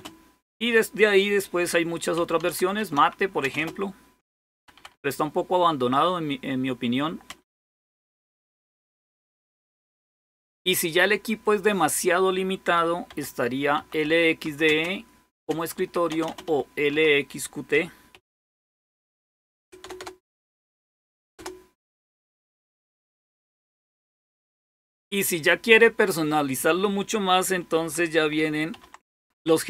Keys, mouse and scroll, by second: 0.0-0.5 typing, 1.9-5.2 typing, 7.3 typing, 12.9-17.9 typing, 19.4 Return, 19.6 Return, 19.8 Return, 20.6 Return, 20.8 Return, 21.0 Return, 28.5-29.0 typing.